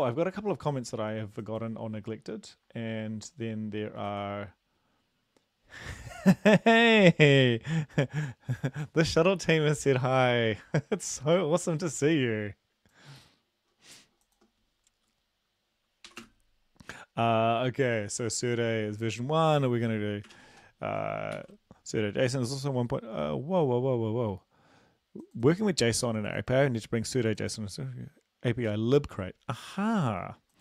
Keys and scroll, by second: 16.1 typing, 20.3-20.6 typing, 21.3 ctrl+s.